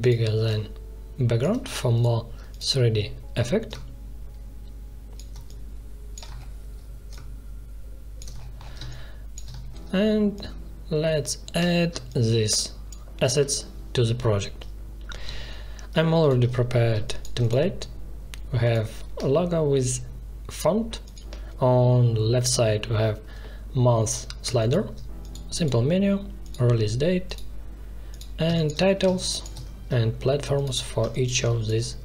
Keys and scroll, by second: 8.7 space, 11.9 space, 16.8 space, 24.4 space, 28.4 space, 30.9 space.